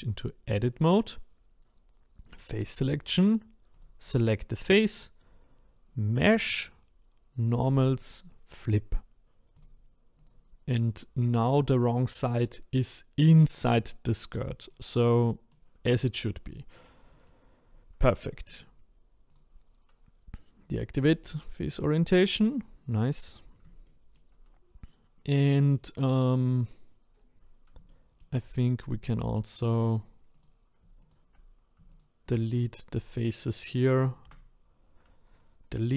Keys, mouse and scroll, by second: 2.7 click, 3.8 click, 8.7 click, 11.4 click, 11.9-16.1 middle drag, 16.1-16.5 scroll down 4, 16.5-21.0 middle drag, 21.0-22.2 drag, 22.2-24.5 middle drag, 24.5-24.9 scroll down 2, 24.9-26.0 middle drag, 26.0-27.2 scroll up 1, 27.2-27.9 scroll up 2, 27.9 shift+middle click, 28.8-30.4 scroll up 1, 30.4 click, 32.0 shift+click.